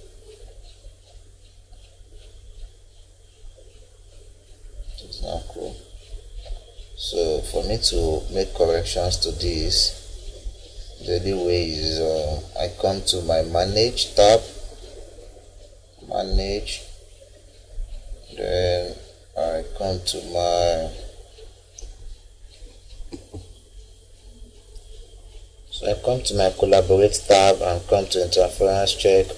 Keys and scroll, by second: 23.3 F9.